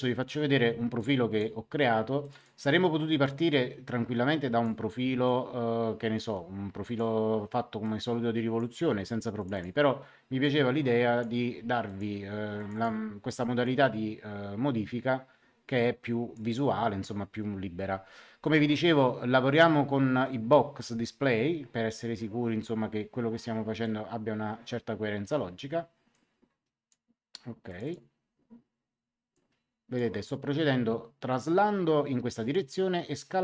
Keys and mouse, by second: 0.9 click, 2.2 click, 3.4 click, 5.2 click, 7.8 click, 9.3 click, 11.8 click, 18.4 click, 19.5 click, 23.8 click, 26.1 click, 27.6 click, 29.3 click, 31.2 click, 33.2 click.